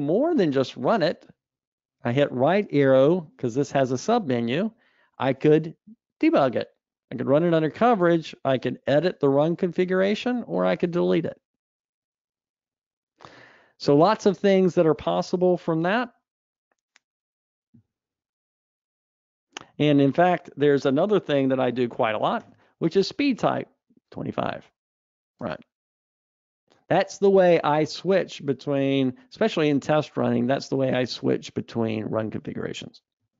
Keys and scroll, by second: 0.2 ctrl+alt+r, 19.0 super+Up, 20.2 Escape, 22.8 ctrl+alt+r.